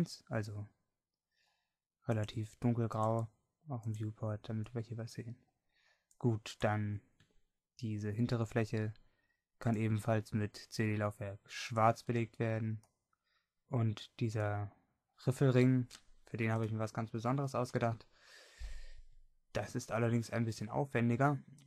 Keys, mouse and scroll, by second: 14.7-16.1 middle drag, 18.1-21.6 middle drag.